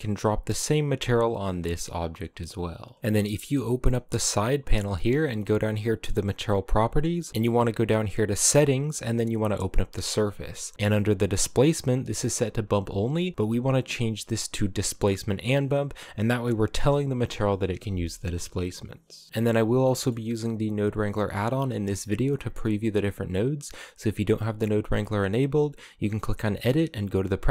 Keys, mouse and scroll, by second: 1.7 right click, 2.6-3.0 scroll down 6, 3.0 middle click, 3.2-5.5 drag, 7.3-11.6 drag, 12.3-15.2 drag, 19.3 a, 19.5-25.3 middle drag, 25.7-27.5 drag.